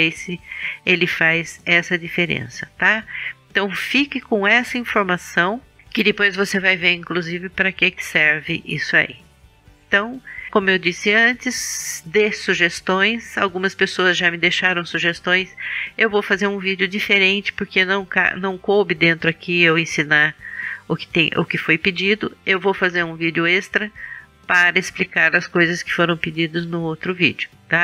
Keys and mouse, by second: 0.0 middle click, 2.8 middle click, 3.3-4.4 middle drag, 4.4 KP_1.